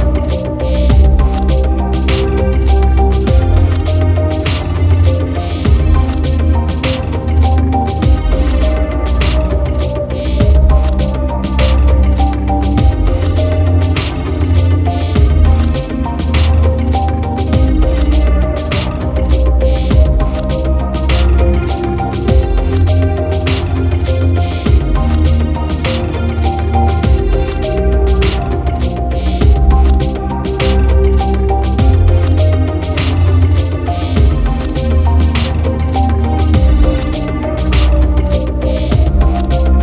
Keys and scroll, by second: 1.3 ctrl+t, 9.0 ctrl+0, 18.4 ctrl+z, 22.6 ctrl+-, 23.6 ctrl+0, 26.3 ctrl+t, 26.8 ctrl+-.